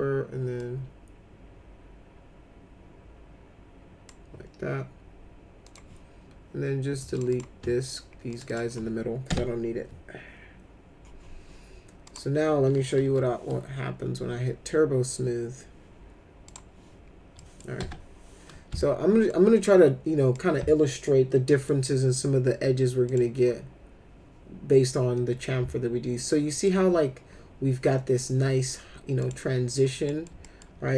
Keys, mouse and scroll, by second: 0.6-4.0 drag, 5.6 click, 7.1 click, 7.3 click, 8.3 ctrl+click, 8.5 ctrl+click, 9.3 ctrl+BackSpace, 12.0 click, 13.0 t, 16.5 click, 17.4 middle click, 17.8 F4, 18.8 alt+middle click, 20.3-21.6 alt+middle drag, 23.0 click, 25.4-26.6 alt+middle drag, 29.2 click, 30.1 middle click, 30.4 alt+middle click.